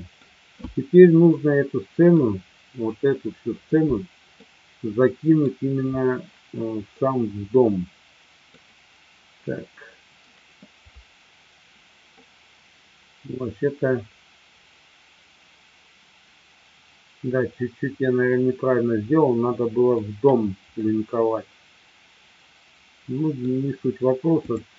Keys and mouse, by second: 1.1-2.2 middle drag, 4.3-5.3 middle drag, 7.0-8.6 middle drag, 12.1-17.0 middle drag, 17.6-20.0 middle drag, 20.9-23.5 middle drag, 24.5-24.7 drag.